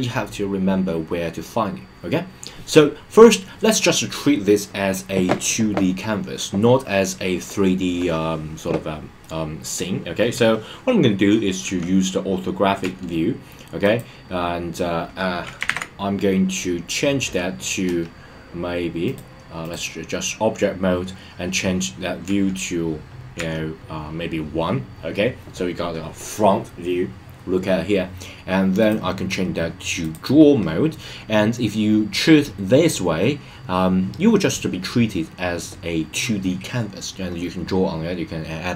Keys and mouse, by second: 9.4-11.6 middle drag, 14.0 click, 15.7 super+z, 17.8 KP_0, 19.1-19.7 drag, 22.2 KP_Decimal, 23.3 KP_1, 28.8-30.1 drag.